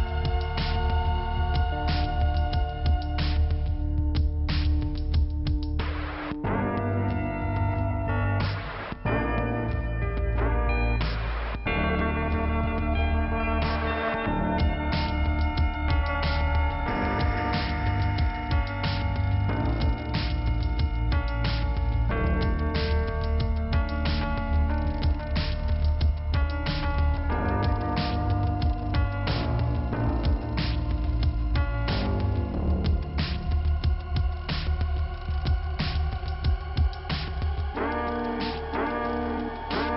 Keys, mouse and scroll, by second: 0.2 click, 1.0 click, 1.3 click, 1.8 click, 2.6 click, 3.3 click, 4.3 click, 5.3 click, 6.4 click, 6.6 click, 7.3 scroll down 2, 8.5-9.6 scroll up 1, 9.6 click, 11.7 scroll up 2, 12.8 scroll down 1, 12.9 scroll up 1, 15.9 click, 16.4 click, 19.0 click, 19.5 right click, 20.4 click, 22.0 click, 22.5 click, 23.3 click, 23.9 click, 24.2 click, 24.9 click, 25.6 click, 26.8 click, 28.1 click, 28.7 scroll down 2, 30.2-31.6 scroll up 1, 31.6 right click, 32.0-33.2 scroll down 2, 35.8 click, 36.1 click, 38.5 click, 39.3-39.8 scroll down 1.